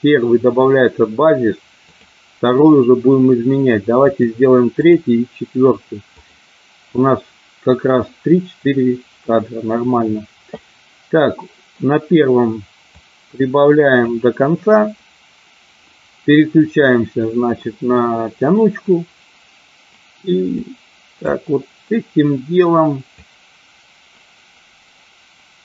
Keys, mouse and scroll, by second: 1.8-2.3 drag, 4.0 click, 5.0 click, 6.2 click, 13.1-14.3 drag, 20.7 click, 23.3-25.6 drag.